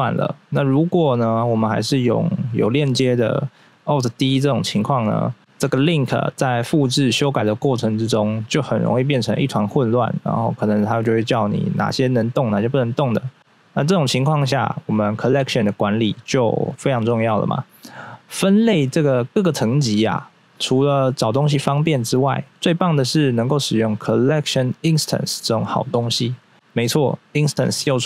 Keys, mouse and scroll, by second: 15.3-15.7 scroll up 1, 18.8-20.0 scroll up 1, 26.0 right click.